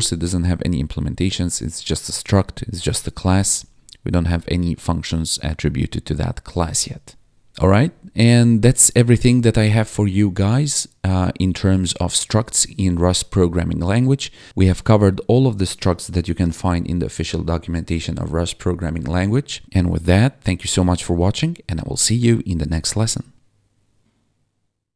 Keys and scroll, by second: 5.9 Tab, 7.6 Down, 8.2 BackSpace, 8.9 ctrl+s, 9.3 Up.